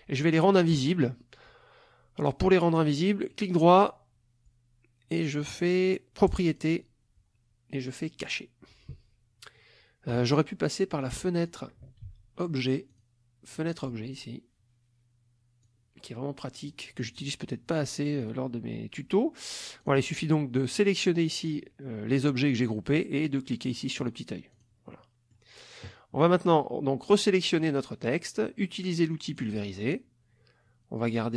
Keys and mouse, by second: 3.2 right click, 6.5 click, 8.3 click, 11.0 click, 11.4 click, 12.0 ctrl+z, 12.9 click, 13.5 click, 15.7-16.9 drag, 17.0 click, 18.2 click, 19.8 click, 20.7 click, 24.0 click, 24.5 click, 24.9 click, 26.2-27.8 drag, 29.3 click.